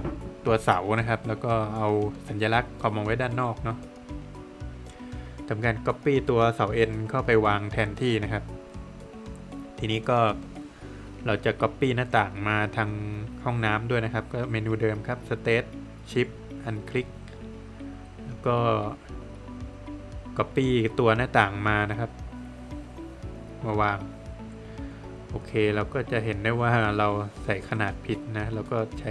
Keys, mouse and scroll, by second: 0.9 Escape, 1.2 scroll up 1, 2.0 click, 2.5 Escape, 3.4 click, 4.1 middle click, 5.1 space, 6.0 click, 7.2 Escape, 7.9 click, 8.8 scroll down 1, 8.9 middle click, 10.2 Escape, 10.6 scroll down 1, 10.9 middle click, 11.5 Escape, 11.6 scroll up 1, 12.9 space, 13.5 click, 15.1 shift+double click, 15.5 space, 15.8 click, 17.0 Return, 17.5 scroll down 1, 17.7 middle click, 18.0 Escape, 19.0 click, 20.8 space, 22.1 click, 22.5 middle click, 24.1 middle click, 24.2 click, 25.6 space, 26.0 Escape, 26.0 scroll up 2, 26.6 Escape, 26.8 Escape, 27.3 space, 27.8 click.